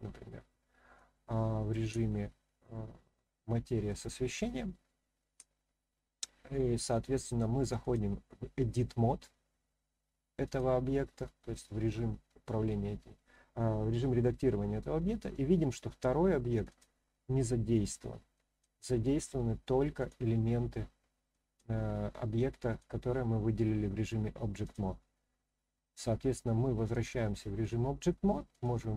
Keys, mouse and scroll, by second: 0.1-1.0 scroll down 1, 1.1-1.7 shift+middle drag, 2.2 scroll up 1, 2.7-3.9 middle drag, 4.6 shift+scroll up 1, 4.7-5.2 shift+middle drag, 7.8-10.6 drag, 11.9-14.5 middle drag, 14.8 scroll up 1, 16.7 click, 18.3 click, 20.0 click, 21.3-21.6 drag, 22.3-22.8 drag, 24.6-27.0 drag, 27.6 click, 28.5 click.